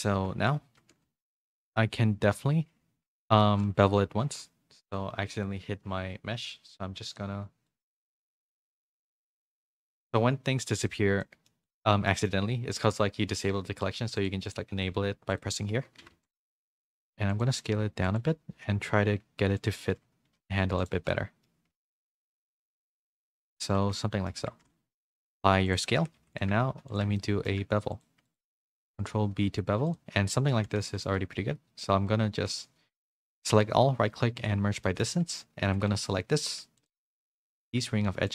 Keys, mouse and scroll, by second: 0.1 KP_3, 0.8 z, 1.3 shift+middle click, 3.2 middle click, 3.6 z, 3.9 2, 7.6 click, 9.5 click, 11.2 middle click, 12.0 middle click, 14.1 click, 14.4 click, 15.3 click, 16.1-18.5 typing, 19.7 z, 20.2 g, 21.1 middle click, 21.7 Tab, 21.9 a, 22.2 s, 23.2 Tab, 23.4 middle click, 23.9 Tab, 23.9 middle click, 24.7 Tab, 24.7 ctrl+a, 25.9 Tab, 26.2 2, 27.2 middle click, 28.5 middle click, 28.9 ctrl+b, 30.2 middle click, 30.5 1, 30.8 a, 31.9-34.8 right drag, 34.8 shift+middle click, 36.0 alt+click, 36.0 3, 36.0 2.